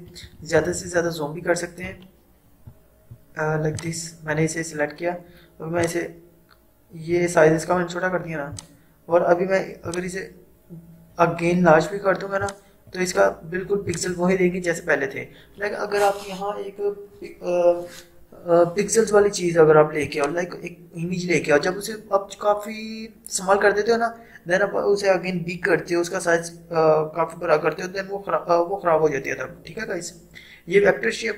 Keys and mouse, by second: 0.1 ctrl+=, 3.8-13.9 drag, 20.2-23.8 drag.